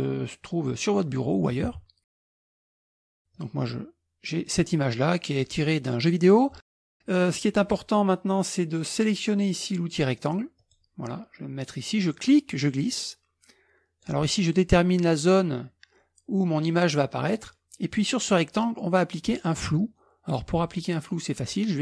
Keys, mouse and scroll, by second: 1.7 Escape, 2.9 ctrl+v, 3.4-4.9 drag, 5.2-7.4 scroll down 1, 10.6 click, 12.2-14.6 drag.